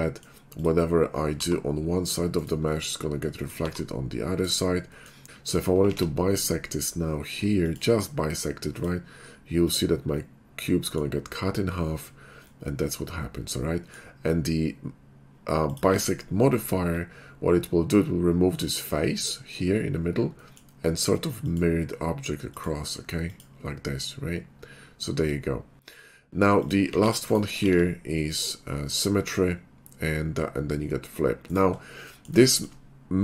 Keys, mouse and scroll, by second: 0.5 click, 1.3 g, 2.4 right click, 3.3 click, 3.6 g, 4.5 right click, 5.0 middle click, 5.5 click, 5.5 3, 6.0 alt+x, 7.7 click, 8.7 click, 9.6 click, 10.2 middle click, 12.6-13.9 middle drag, 15.6 click, 16.1 alt+x, 21.5 click, 22.5 click, 23.3 click, 26.5 click, 26.9 alt+x, 27.3 right click, 29.0 alt+x, 29.0 click, 31.5 right click, 32.6 shift+middle click.